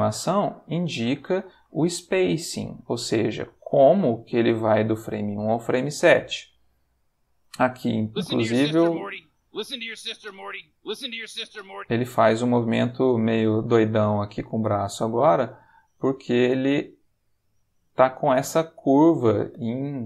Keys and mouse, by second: 4.1 click, 5.9-7.9 drag, 8.0 space, 11.7 space, 12.4-19.9 drag.